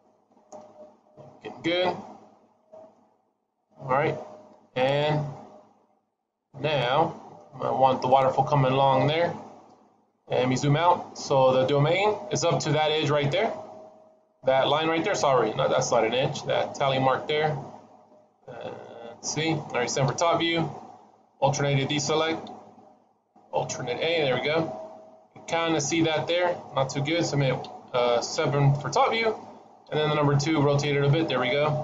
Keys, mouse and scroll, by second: 3.8-6.1 scroll up 1, 6.1 middle click, 6.1-6.7 scroll up 2, 8.9 KP_1, 9.6-10.1 scroll down 3, 10.1-11.9 scroll down 2, 11.9-12.7 scroll down 1, 17.3-17.8 scroll up 1, 18.0 middle click, 19.1-19.9 scroll up 1, 19.9-20.3 scroll up 1, 19.9 KP_7, 23.5 alt+a, 24.2-25.8 scroll up 3, 25.8 middle click, 25.8 scroll up 1, 26.2 middle click, 27.5 KP_8, 28.2 KP_1, 28.7 KP_7, 29.7 KP_2, 30.9-31.6 scroll down 3.